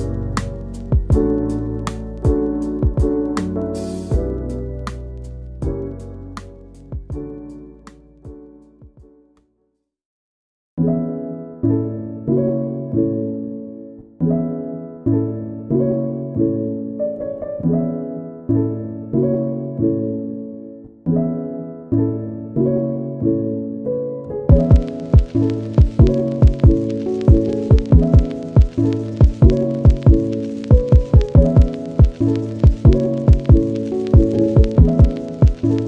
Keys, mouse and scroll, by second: 0.8 middle click, 1.0 scroll up 1, 1.8 ctrl+a, 2.5 scroll down 2, 2.6 middle drag, 2.9 ctrl+a, 3.3 scroll down 1, 3.5 middle drag, 3.8 Tab, 4.0 click, 4.1 scroll up 1, 4.4 click, 7.8 scroll down 1, 8.2 click, 8.4-10.0 middle drag, 10.4 scroll down 1, 10.6-11.9 shift+middle drag, 12.1-12.6 middle drag, 12.7 scroll up 1, 12.9 click, 14.3 scroll up 2, 14.6 scroll down 1, 15.3 click, 16.1 drag, 16.4-17.4 middle drag, 17.4 click, 18.6-19.4 middle drag, 19.4 scroll down 1, 19.5 middle drag, 19.8-20.1 scroll up 1, 20.1-20.6 middle drag, 20.6-21.0 scroll down 1, 21.0 shift+middle click, 21.2 scroll up 2, 21.3-22.9 middle drag, 22.9 scroll down 1, 25.5-29.2 middle drag, 29.5 scroll down 1, 29.7-31.1 scroll up 2, 31.1-34.1 right drag, 34.1-35.8 middle drag.